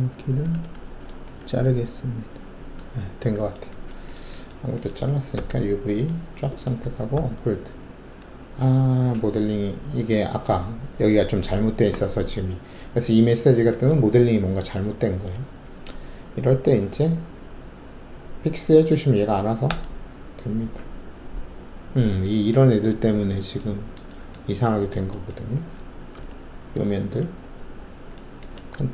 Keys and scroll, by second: 3.1 alt+w, 5.3 alt+4, 7.1 d, 26.1 alt+4.